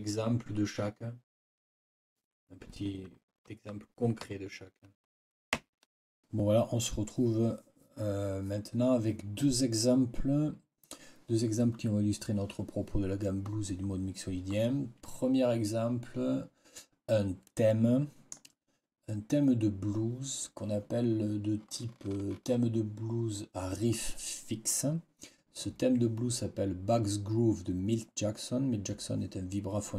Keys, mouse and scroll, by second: 17.6-18.5 scroll up 2.